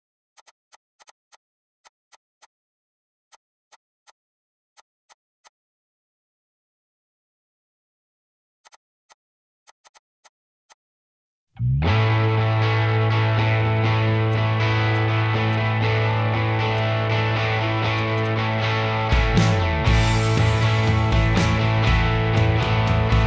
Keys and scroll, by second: 1.6 b, 5.7-6.0 Escape, 9.3 b, 10.5 b, 10.9 Escape, 11.0 Escape, 11.2 Escape, 19.8-21.9 typing, 21.9 Return.